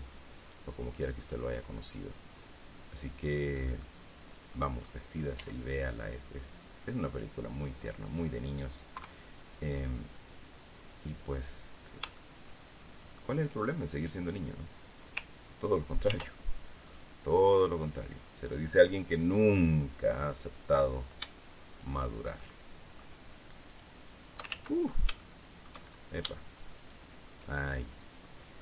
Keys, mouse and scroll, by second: 1.7 shift+right click, 3.7 shift+right click, 4.4-5.6 shift+middle drag, 5.9 e, 8.6 click, 9.5 KP_3, 12.7-13.9 shift+middle drag, 16.6 ctrl+r, 17.4 click, 17.7 middle click, 17.9 click, 18.2-20.1 middle drag, 20.1 middle click, 22.3 shift+right click, 22.9 shift+middle click, 24.2 shift+right click, 25.1 ctrl+shift+z, 25.7 shift+middle click, 27.3 shift+right click.